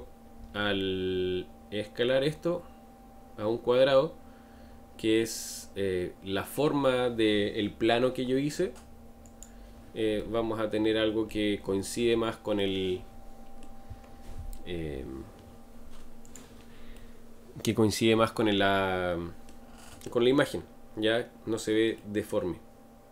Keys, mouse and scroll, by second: 12.6-14.0 middle drag, 14.0-14.8 scroll up 8, 16.2 click, 16.9-20.4 middle drag, 20.4-21.2 scroll down 6, 22.0-23.1 middle drag.